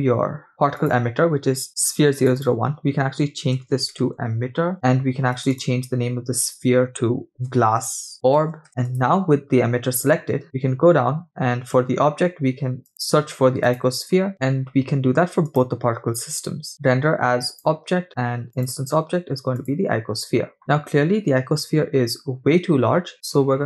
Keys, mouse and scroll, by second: 0.8 click, 2.3 click, 2.4-4.7 drag, 4.1 t, 5.4-9.0 drag, 8.0 s, 10.4-10.9 scroll down 8, 12.9-14.3 drag, 14.3-16.0 scroll up 10, 16.1-17.7 drag, 16.7-17.3 scroll down 7, 18.5-20.0 drag, 20.6-21.0 scroll up 8, 21.1-21.9 scroll down 5, 21.9-22.5 scroll up 2, 23.1-23.6 scroll down 6.